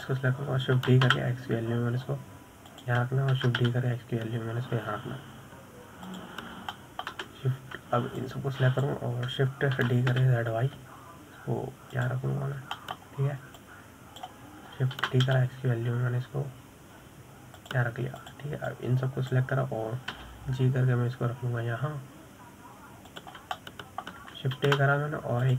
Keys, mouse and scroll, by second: 0.6-1.0 scroll down 2, 1.0-1.7 shift+middle drag, 1.7 click, 3.2 shift+d, 5.7 shift+d, 9.1-10.6 shift+middle drag, 10.6 click, 12.2 shift+d, 14.7-15.1 scroll down 1, 15.1 shift+middle click, 16.0 click, 17.4 shift+d, 20.6 click, 22.5 g.